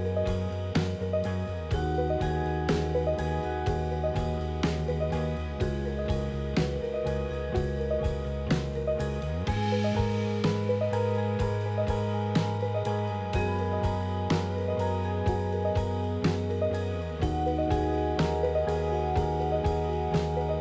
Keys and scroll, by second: 4.3 j, 6.0 j, 8.6 j, 10.1 j, 12.0 j, 13.5 j, 15.1 j, 16.6 ctrl+z.